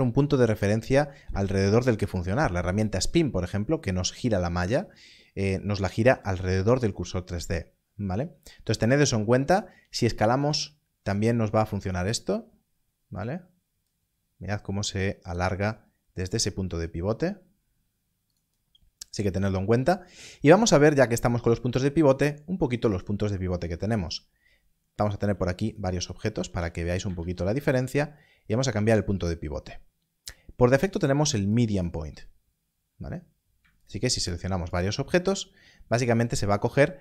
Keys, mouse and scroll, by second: 10.4 click, 13.8 click, 15.3 right click, 18.3 right click, 22.9 click, 25.0 click, 25.2 Left, 25.3 g, 26.0 click, 26.3 shift+d, 28.5 click, 31.5 click, 33.8 shift+click.